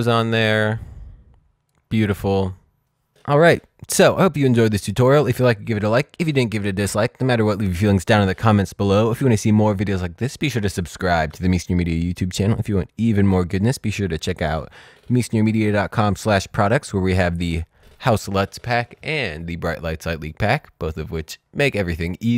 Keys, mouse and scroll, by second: 0.4 click, 1.4-1.8 scroll down 2.